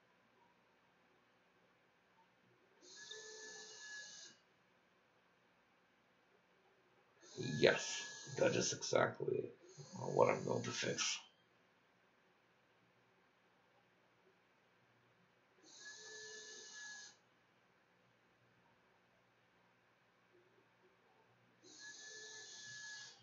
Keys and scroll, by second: 12.2 space, 14.4 3, 15.6-20.7 typing, 18.7 Home.